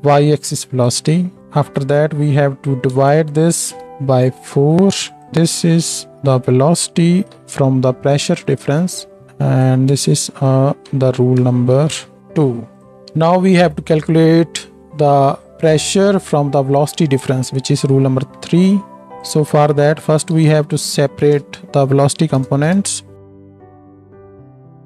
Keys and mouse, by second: 0.0 click, 0.1 right click, 0.8-1.4 right drag, 5.3-6.4 right drag, 7.3 ctrl+j, 10.9 F2, 12.8-19.2 right drag, 23.5 click, 23.9 ctrl+shift+d, 23.9 middle click, 24.0 right click, 24.1 middle click, 24.4 right click, 24.5 ctrl+shift+d.